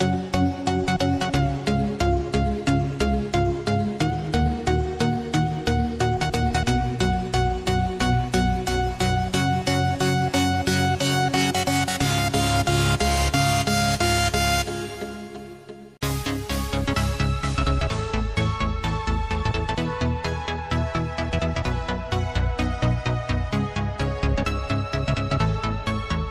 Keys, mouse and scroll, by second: 0.2 scroll down 1, 1.2 click, 1.5 scroll down 1, 2.5 click, 5.4-8.8 drag, 10.6-13.2 drag, 14.9 scroll down 1, 16.5 click, 18.9 click, 19.6 shift+a, 21.7 click, 25.4 click.